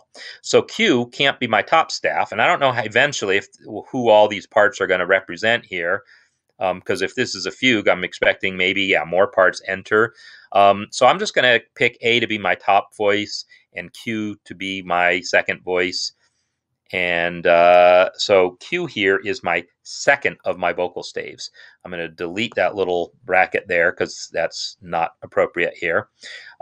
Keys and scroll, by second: 23.5 BackSpace.